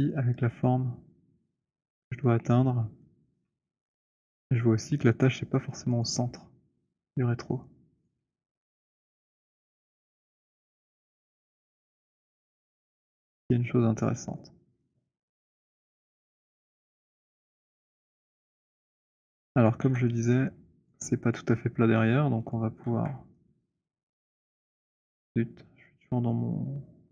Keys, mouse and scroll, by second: 2.2 middle click, 3.4 alt+middle click, 3.6-5.2 scroll, 6.2 click, 7.8 click, 10.2 j, 11.5-12.9 j, 13.1 j, 16.8 alt+middle click, 17.9 alt+middle click, 18.4 alt+right click, 19.2 alt+middle click, 19.7 alt+right click, 20.0 w, 20.9 right click, 21.2 click, 22.5 click, 23.0 w, 24.5 right click, 24.8 click.